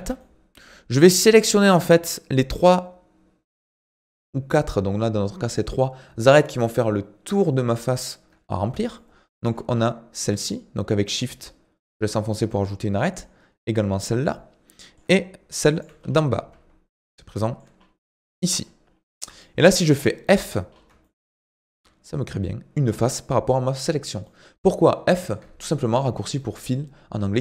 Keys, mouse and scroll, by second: 0.2-1.6 shift+middle drag, 1.6-2.0 scroll up 2, 2.0-5.8 shift+middle drag, 8.5-8.9 scroll down 3, 8.9 shift+middle click, 9.7-10.2 scroll up 2, 10.4 shift+click, 13.1 shift+click, 14.1 scroll down 1, 14.3-15.7 shift+middle drag, 15.7 shift+click, 16.0-17.1 scroll up 4, 17.1-17.4 scroll up 6, 17.4 shift+middle click, 17.8-18.6 scroll up 4, 18.6-19.4 scroll down 13, 19.4-20.7 shift+middle drag, 20.7-21.0 scroll up 4, 21.0 shift+middle click, 21.7 f, 22.2-24.2 scroll down 2, 24.2-27.4 middle drag.